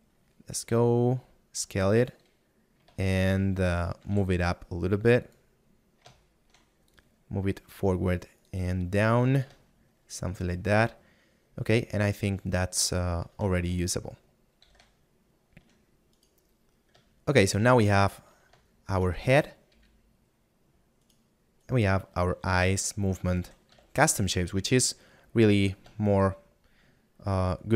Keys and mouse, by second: 0.0 middle click, 3.6 shift+middle click, 6.3 middle click, 7.2 shift+click, 8.8 click, 10.2 shift+middle click, 14.4 middle click, 17.2 middle click, 21.6 right click, 26.2 middle click.